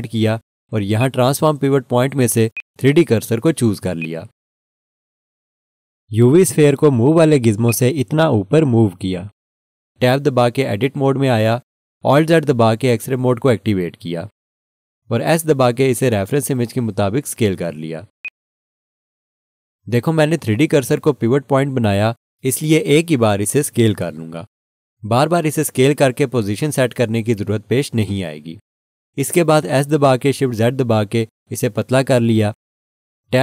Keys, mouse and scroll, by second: 7.6 click, 12.9 Tab, 13.0 alt+z, 18.2 click, 30.2 s, 30.8 shift+z.